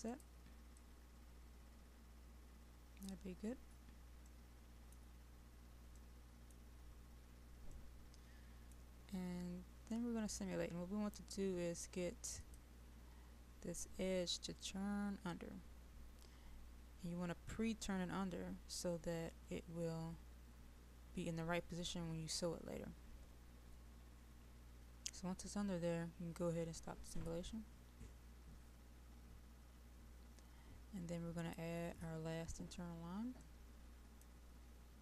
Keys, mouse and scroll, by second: 4.8 middle click, 5.1 scroll down 1, 6.0 middle click, 6.7-7.9 scroll down 1, 7.9-9.4 middle drag, 12.5 click, 32.5-33.5 scroll down 1, 33.5 middle click, 34.6-35.0 scroll down 1.